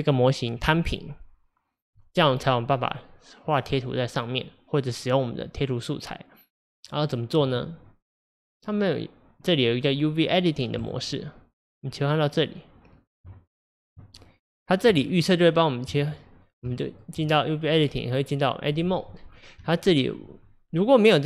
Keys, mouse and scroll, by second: 6.8-10.8 middle drag, 10.8 click, 12.0 click, 14.0 Tab, 15.9 Tab, 16.8-19.3 shift+middle drag, 19.3 scroll up 4, 19.7-21.2 shift+middle drag.